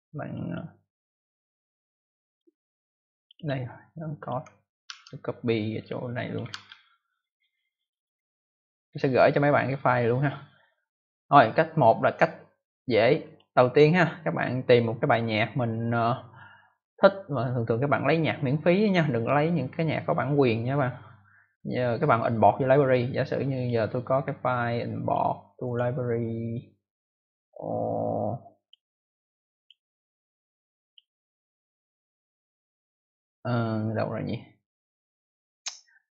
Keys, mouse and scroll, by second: 0.2 click, 0.4 click, 0.4 double click, 3.1 click, 3.3 click, 3.4 double click, 4.1 double click, 4.8 ctrl+c, 5.7 click, 6.2 click, 6.4 ctrl+v, 13.1 click, 23.5 click, 24.9 click, 25.6 click, 28.5 click, 29.5 click, 30.8 click, 33.7-34.1 scroll down 1.